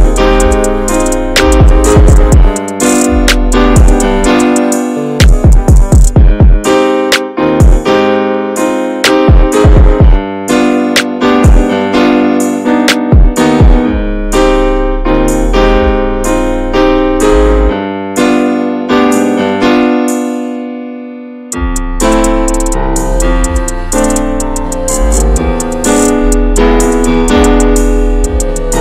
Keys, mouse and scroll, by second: 1.2 s, 2.0 s, 4.3 h, 5.1 ctrl+z, 5.9 g, 6.9 Tab, 7.1-7.5 drag, 7.5 middle drag, 7.8 scroll up 1, 7.9-8.4 drag, 8.4 middle click, 8.7 Tab, 9.1-13.3 middle drag, 13.3 /, 13.7 Tab, 13.9 drag, 14.2 scroll down 2, 14.4 middle drag, 14.7 s, 15.1-15.5 shift+middle drag, 15.5 ctrl+s, 15.8 click, 16.3 /, 16.7 middle click, 17.0 Tab, 17.5 shift+middle click, 17.7-19.0 scroll up 9, 18.1 shift+middle click, 18.5 middle click, 19.0 shift+middle click, 19.9 3, 20.1 click, 20.6-21.8 middle drag, 21.8 x, 21.9-22.2 scroll down 2, 22.2 middle click, 22.6 scroll down 1, 22.9-24.4 shift+middle drag, 24.4-25.0 scroll up 2, 25.0 click, 25.3 middle click, 25.4-26.3 scroll up 5, 25.7 shift+middle click, 26.3 s, 27.2 x, 27.6 scroll up 1, 28.0 2, 28.5 click.